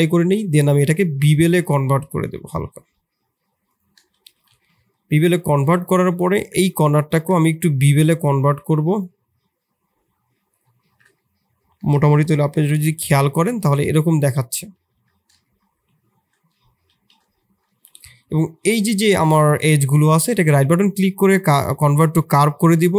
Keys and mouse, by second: 1.1 click, 4.5 shift+z, 4.9 click, 11.2 click, 12.7 /, 13.2 click, 13.5 shift+z, 14.2 middle click, 14.7 shift+z, 15.7 /, 16.8 shift+z, 17.3 middle click, 17.6 Tab, 18.7 click, 19.3-20.0 middle drag, 20.6-22.9 right drag.